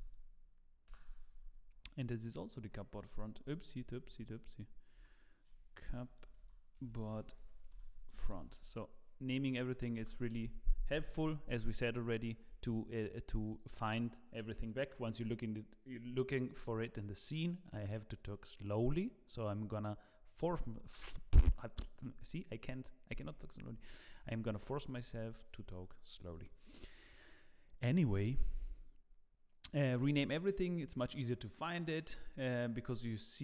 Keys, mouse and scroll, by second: 2.2 click, 3.2 F3, 4.9 F2, 11.7 click, 12.2 shift+click, 12.8 click, 25.4 middle click, 26.4 shift+middle click, 30.3 middle click, 30.8 click.